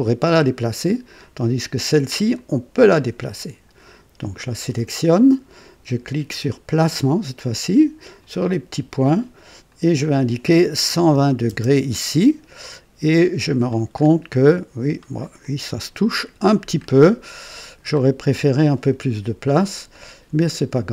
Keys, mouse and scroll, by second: 2.3 click, 4.1 click, 6.7 click, 8.2 click, 9.7 click, 10.9 KP_1, 11.1 KP_2, 11.5 KP_0, 12.6-13.7 drag, 13.9-14.2 scroll up 1, 14.4-15.0 right drag, 15.4-16.5 drag, 16.7 scroll up 1, 17.3 right click, 18.1 scroll down 1, 20.6 click.